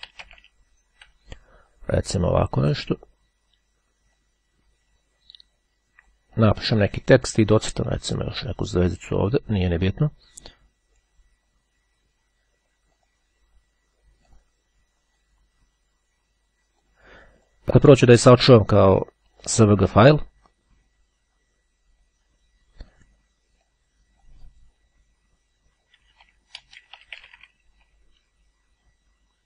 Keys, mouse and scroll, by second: 0.0-0.7 typing, 2.9 click, 4.3-7.1 drag, 7.7 click, 9.1-10.7 drag, 13.1 click, 14.5 click, 15.4-17.5 drag, 18.3 click, 19.3 click, 22.5-23.7 drag, 24.8 p, 26.2-27.5 typing.